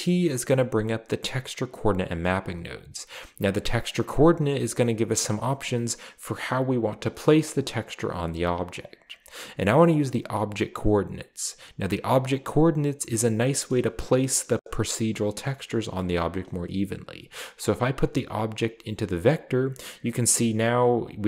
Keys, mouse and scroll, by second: 0.1 middle click, 2.4 click, 2.8 click, 3.5 click, 8.8 click, 17.7-19.1 drag, 19.5-19.9 scroll down 2.